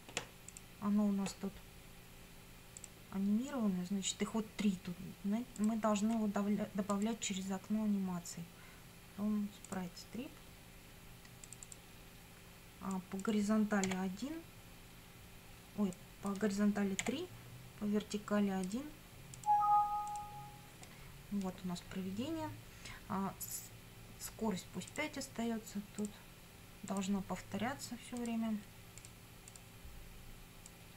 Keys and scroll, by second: 13.8 1, 17.0 3.